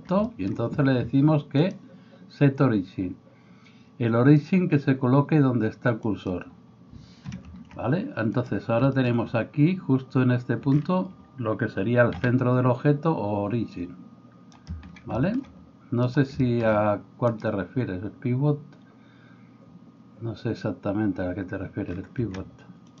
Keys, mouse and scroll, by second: 8.4-16.1 middle drag, 12.2 r, 16.1 click, 16.3-17.3 shift+middle drag, 17.3 click, 17.5-23.0 middle drag.